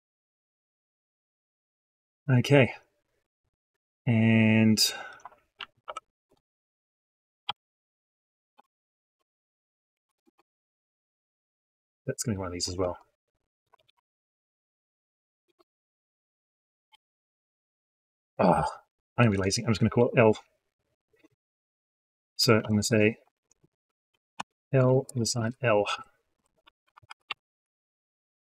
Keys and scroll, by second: 12.6 ctrl+c, 13.6 ctrl+v.